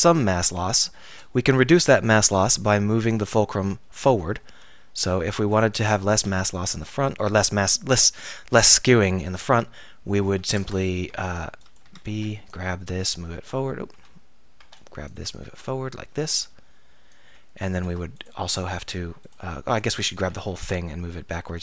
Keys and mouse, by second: 0.5-0.8 drag, 4.5 alt+r, 6.3 z, 6.8 a, 7.8 z, 10.6 Tab, 11.1 b, 11.8-14.0 drag, 11.9 z, 12.1 b, 14.0 a, 14.7 b, 15.7-17.5 drag, 17.9 Tab, 19.9 Tab, 20.2 a, 20.5 a.